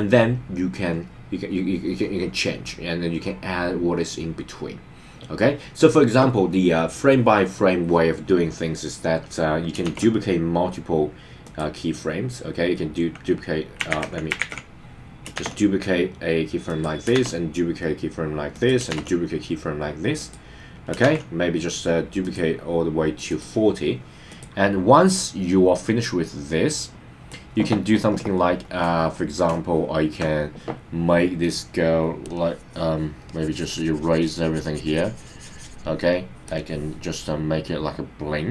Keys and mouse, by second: 9.8 shift+d, 11.4 click, 13.9 super+z, 14.4 super+z, 15.3 shift+d, 16.7 click, 17.1 shift+d, 18.5 click, 18.9 shift+d, 20.2 click, 21.1 shift+d, 22.2 click, 23.3 click, 24.2 click, 25.7-27.3 drag, 29.8 shift+middle click, 32.3 click, 33.3 click, 36.5 click.